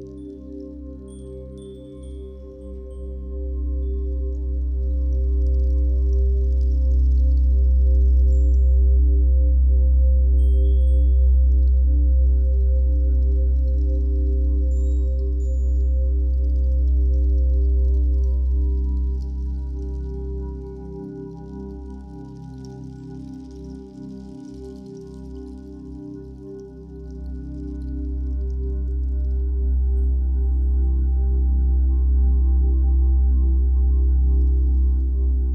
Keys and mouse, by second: 0.8-6.6 drag, 8.4 ctrl+alt+click, 9.4 alt+shift+click, 9.8 ctrl+alt+click, 10.9-14.1 ctrl+alt+drag, 14.6-15.8 drag, 16.4 click, 19.2 click, 21.2 click, 22.5 click, 23.0 click, 24.4 click, 25.5 click, 26.3 click, 30.5 alt+click.